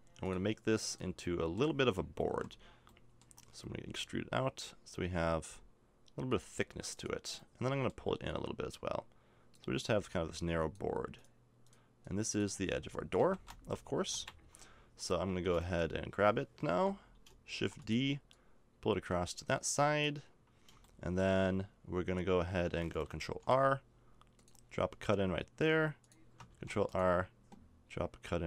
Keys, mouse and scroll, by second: 1.2-2.4 middle drag, 2.3 KP_Decimal, 3.3 middle click, 3.9 e, 7.6 middle click, 8.3-9.7 drag, 8.3-9.5 right drag, 13.2 KP_1, 14.1 KP_0, 15.3 a, 16.7 l, 17.6 shift+d, 23.2 ctrl+r, 26.5 ctrl+r.